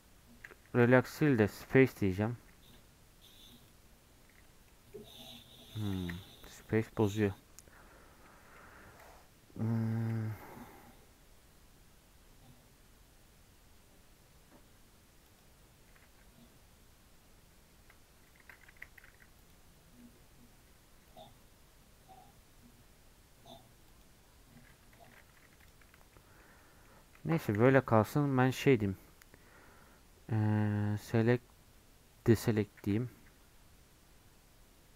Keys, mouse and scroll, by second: 0.0 right click, 0.7 ctrl+z, 1.6-2.7 right drag, 3.8 right click, 4.7 middle click, 5.0 scroll up 1, 5.2 middle click, 6.0 ctrl+z, 8.5 3, 18.4 ctrl+z, 18.7 a, 21.1-24.2 right drag, 25.0 ctrl+z, 25.6 click, 25.9 scroll down 2, 26.1 middle click, 26.4 scroll up 3, 26.6 middle click, 27.6 a, 31.0-33.3 drag, 33.3 x.